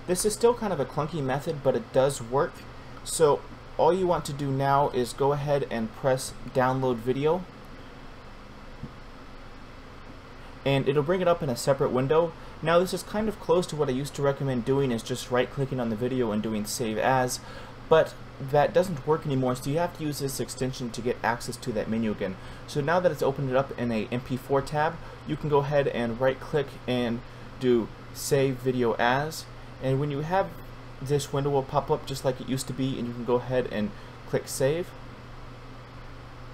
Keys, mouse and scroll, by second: 6.5 click, 24.7 right click, 28.6 click.